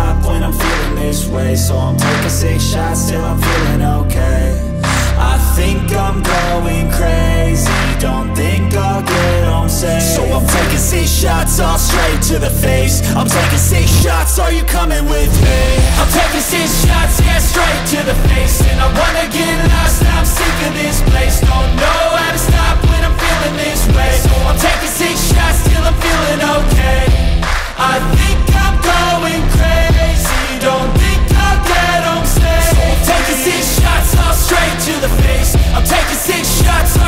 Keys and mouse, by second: 9.0 click, 11.7 click, 12.6 click, 16.2 click, 19.7-28.4 drag, 29.2 click.